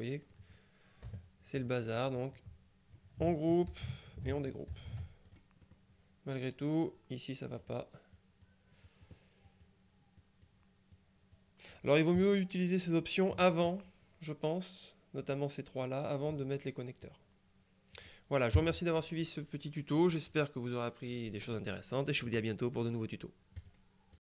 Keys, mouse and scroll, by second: 1.2 KP_Subtract, 2.3-3.6 drag, 3.8 ctrl+g, 4.8 shift+g, 5.4-6.3 shift+drag, 5.8-6.3 shift+scroll up 1, 7.7 click, 9.0 click, 9.6 click, 10.3 click, 18.1 click, 18.6 KP_Subtract, 19.8 click, 20.0 middle click, 20.2 click.